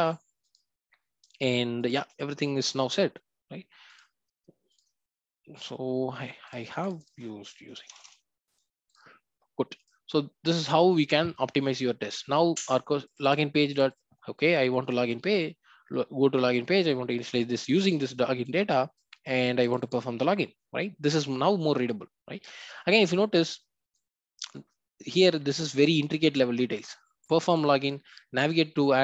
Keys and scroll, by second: 3.9 ctrl+b.